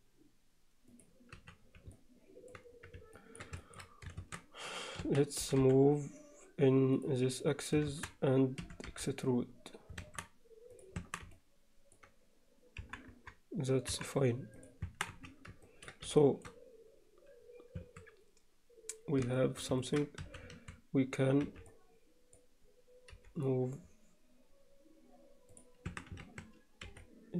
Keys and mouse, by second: 1.4 z, 1.9 alt+middle click, 3.2 ctrl+alt+middle click, 3.6 alt+shift+middle click, 4.2 shift+Tab, 5.1 a, 5.5 g, 7.9 shift+Tab, 8.7 e, 11.0 Tab, 11.3-12.0 alt+middle drag, 12.8 KP_1, 13.1 KP_3, 13.9 KP_1, 14.6 click, 14.9 Tab, 15.1 z, 15.7 ctrl+alt+middle click, 16.2 shift+middle click, 17.8 a, 19.4 shift+middle click, 19.9 ctrl+alt+middle drag, 20.3 a, 21.5 b, 23.1 g, 25.9 a, 26.9 b.